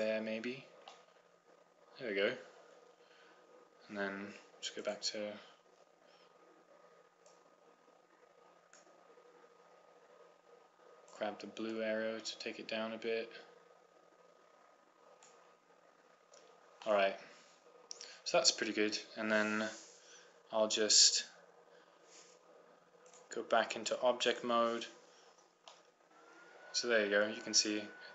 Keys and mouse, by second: 1.0 click, 2.0-3.0 middle drag, 5.6 click, 6.5 click, 9.3 click, 12.7 click, 17.0-19.4 middle drag, 26.1-28.0 middle drag.